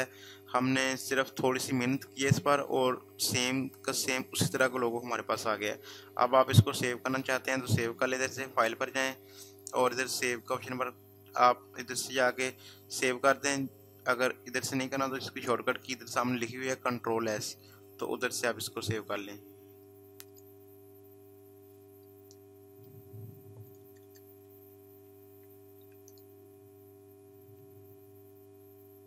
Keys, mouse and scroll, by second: 7.1 click, 20.1 click, 24.2-25.4 typing, 27.5-28.2 typing.